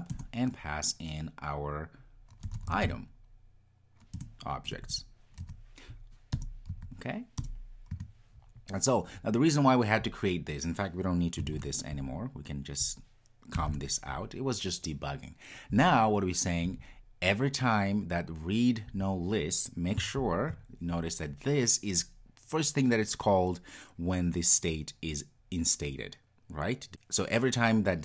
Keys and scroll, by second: 0.1 Return, 20.3 super+b.